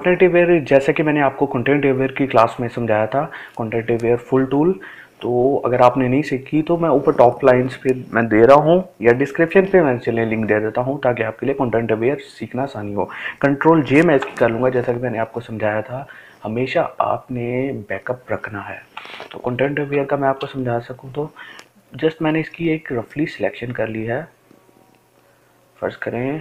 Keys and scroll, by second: 12.8 ctrl+j.